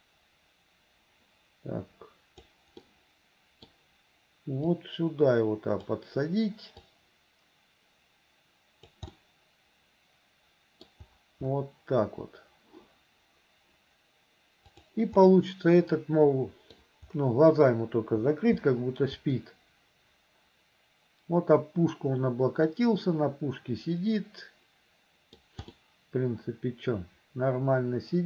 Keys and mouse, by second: 3.0 middle click, 4.9-5.9 drag, 6.8-9.0 drag, 9.3-11.0 drag, 14.7 right click, 15.4-16.8 drag, 19.4-25.4 drag, 25.9-28.2 middle drag.